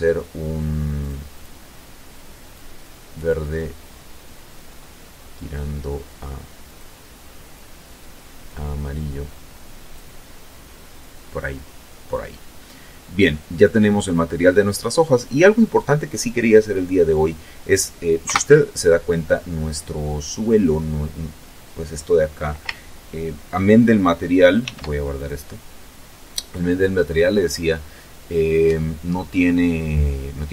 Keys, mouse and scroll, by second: 0.1 click, 1.3 click, 3.1-3.7 scroll down 2, 4.2 scroll up 2, 5.4 click, 6.3 click, 9.7-10.1 scroll down 2, 10.1 middle click, 11.9-12.3 scroll up 2, 12.4-12.8 scroll down 2, 16.9 KP_0, 23.4 ctrl+s, 23.9 ctrl+click.